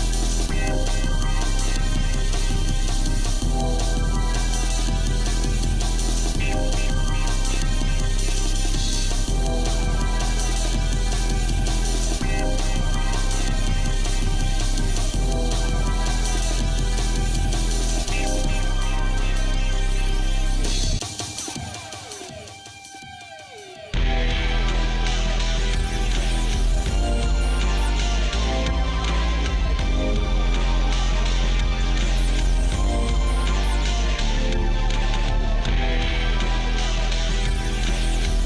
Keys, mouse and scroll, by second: 0.5 middle click, 1.1 shift+middle click, 2.0 scroll down 1, 2.5 shift+middle click, 3.4 click, 4.4 g, 8.6-9.6 shift+middle drag, 9.7 shift+middle click, 10.3 click, 10.9-13.3 shift+middle drag, 13.6 shift+middle click, 14.5 g, 20.3-21.7 shift+middle drag, 22.0 scroll up 1, 23.1 g, 26.8 shift+middle click, 27.8 middle click, 28.5 click, 28.8 shift+middle click, 30.2 g, 37.0-38.4 shift+middle drag.